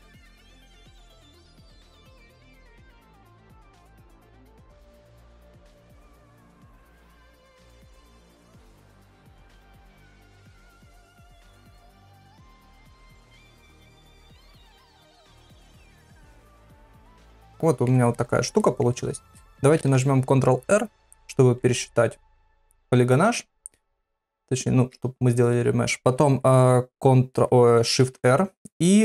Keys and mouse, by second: 0.2 click, 0.3 click, 0.5 middle click, 0.8 click, 1.0 click, 1.3 middle click, 1.6 click, 1.8 middle click, 2.0 ctrl+middle click, 2.3 shift+middle click, 2.8 middle click, 3.4 ctrl+Tab, 4.5 s, 5.7 KP_3, 6.0 ctrl+a, 6.8 ctrl+Tab, 8.0 KP_7, 8.5 ctrl+middle click, 9.0 ctrl+middle click, 9.5 click, 9.6 click, 9.8 click, 10.1 click, 10.3 click, 10.5 click, 10.7 click, 10.9 click, 11.7 click, 11.9 click, 12.2 click, 12.6 click, 12.8 click, 13.1 click, 13.3 click, 13.5 click, 13.6 click, 13.8 click, 13.9 click, 14.3 click, 14.4 click, 14.7 click, 15.8 click, 16.1 middle click, 16.9 click, 17.2 ctrl+middle click, 17.4 middle click, 17.6 shift+middle click, 18.2 middle click, 18.6 shift+middle click, 22.6 ctrl+r, 24.5 click, 28.0 shift+r.